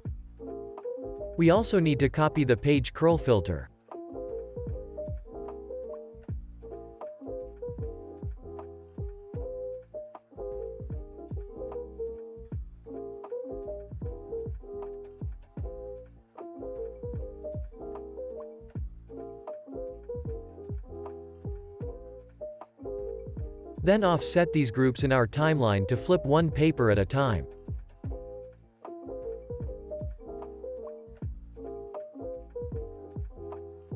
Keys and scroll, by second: 1.3 super+c, 2.2 super+v, 11.3 super+c, 12.9 super+v, 14.5 super+v, 15.8 super+c, 16.7 super+v, 18.6 super+v, 21.2 super+s, 26.6 super+s.